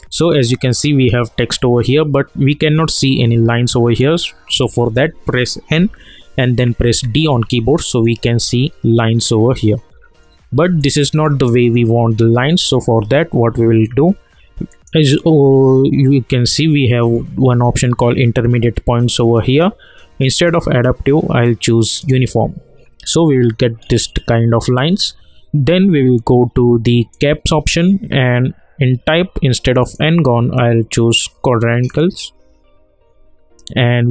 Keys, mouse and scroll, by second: 2.3-3.3 scroll up 1, 3.5 alt+middle click, 4.3-4.7 scroll down 1, 5.8 n, 6.9 d, 8.4 scroll up 1, 10.8-14.1 alt+drag, 14.7 alt+click, 20.2 click, 23.7 scroll down 1, 23.8 scroll up 1, 27.1 click, 29.8 click.